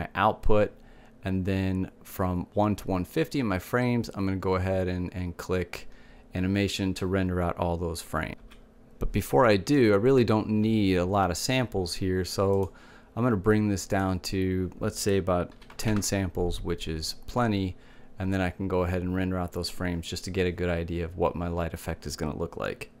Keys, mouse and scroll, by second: 0.0 click, 11.9-13.4 middle drag, 13.4-16.6 drag, 18.4-23.0 middle drag.